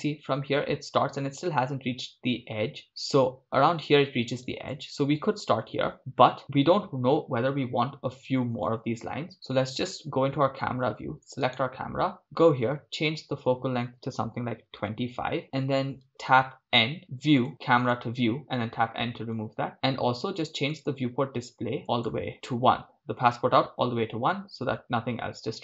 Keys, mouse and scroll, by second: 9.7 KP_0, 11.5 right click, 12.2 click, 14.8 click, 16.6 n, 17.4 click, 19.3 click, 21.8 scroll down 3, 21.8-25.6 drag.